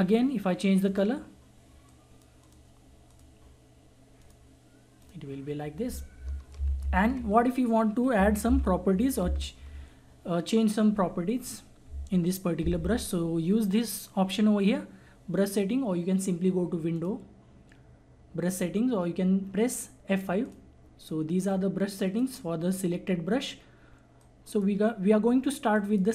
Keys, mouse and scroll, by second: 6.5 ctrl+z, 8.4 ctrl+z, 16.9 click, 20.4-25.7 drag.